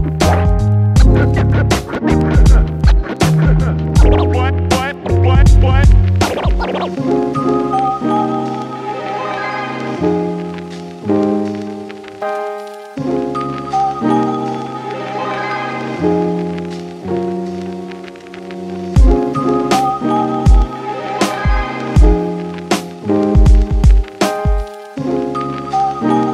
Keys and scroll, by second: 11.1 ctrl+Delete.